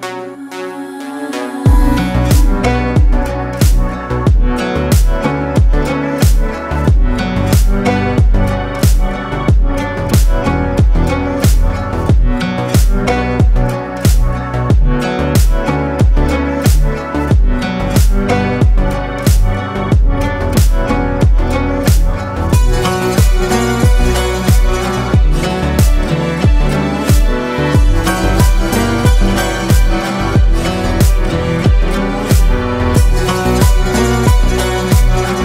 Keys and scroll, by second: 1.5 ctrl+z, 5.0 ctrl+space, 6.2 ctrl+space, 16.4 ctrl+g, 26.9 ctrl+space, 33.0 ctrl+z.